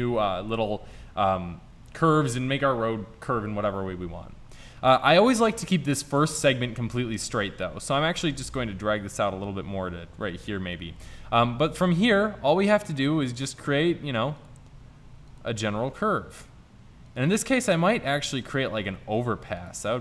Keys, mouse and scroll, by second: 8.5-10.3 drag, 11.8 e, 13.8 e, 14.8 e, 15.6 e, 17.4 e, 18.7 e, 19.9 e.